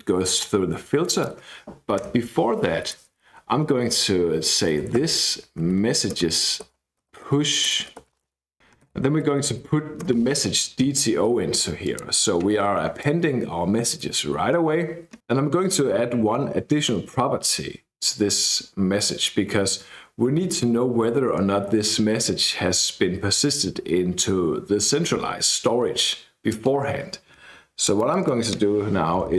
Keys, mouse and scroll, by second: 1.1 click, 2.0 KP_Enter, 2.8 BackSpace, 4.4-9.9 typing, 10.0 Return, 11.8 click, 13.0-14.3 drag, 29.2 {.